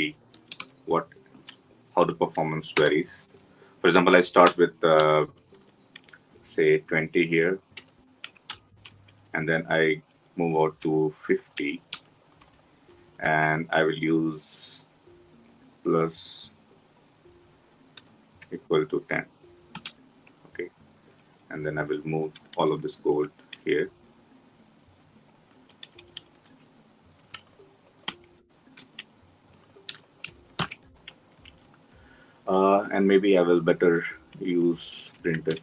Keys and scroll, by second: 2.8 Return, 17.8 Delete, 28.0 ctrl+shift+Up, 30.0 ctrl+y, 31.4 ctrl+alt+l.